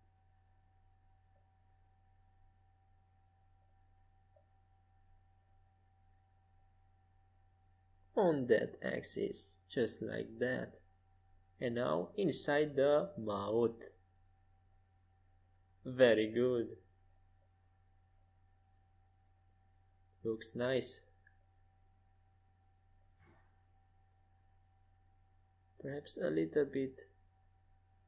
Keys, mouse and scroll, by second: 3.1-6.3 middle drag, 6.3-8.1 drag, 7.4 s, 12.1-15.9 drag, 16.2-18.3 middle drag, 23.3-25.0 middle drag, 25.2 middle click, 25.4 click, 25.5 middle click, 26.7-28.0 drag, 27.7 s.